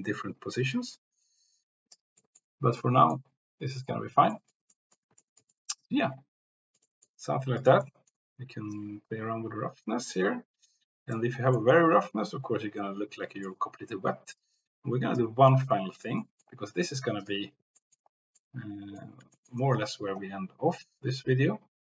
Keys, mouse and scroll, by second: 0.6-1.9 drag, 2.1 click, 2.9 click, 4.5 click, 4.9 drag, 5.3 shift+click, 5.7-6.8 drag, 7.0 click, 7.6 click, 8.0 middle click, 11.5-13.5 middle drag, 15.6-16.0 drag, 16.3 click, 17.2 click, 17.9 click, 18.5 click, 19.5 shift+click, 19.7 click, 20.9-21.8 drag.